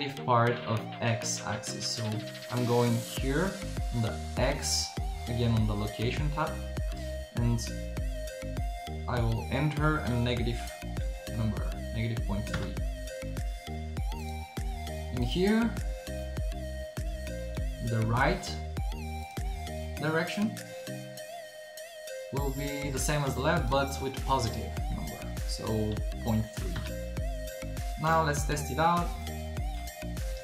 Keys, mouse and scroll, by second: 4.6 middle click, 16.5 middle click, 25.5 middle click, 28.0-29.2 middle drag, 29.2 click, 29.3 middle click, 30.3 p.